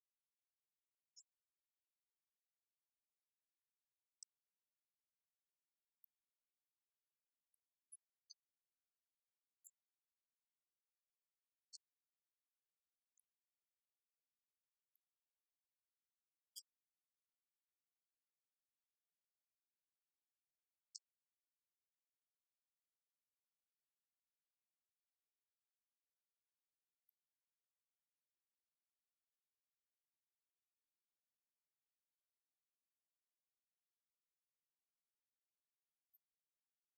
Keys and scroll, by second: 3.8 ctrl+n, 6.7 ctrl+v.